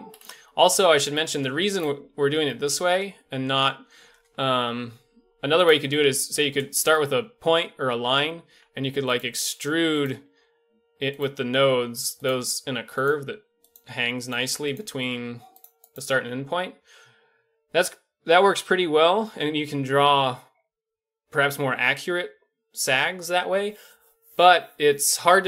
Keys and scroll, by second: 4.6 shift+d, 8.5 e, 9.3 e, 10.2 e, 11.3 e, 12.3 e, 13.4 e, 13.8 e, 14.4 e.